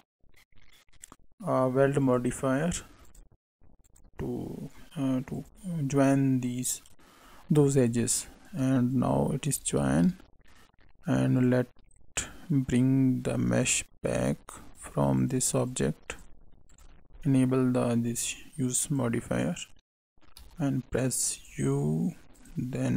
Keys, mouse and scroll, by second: 2.0 click, 3.0 click, 3.8 click, 7.7 click, 8.9 click, 9.8 shift+a, 15.1 click, 15.6 click, 16.6 click, 17.2 middle click, 18.0 click, 20.3 u.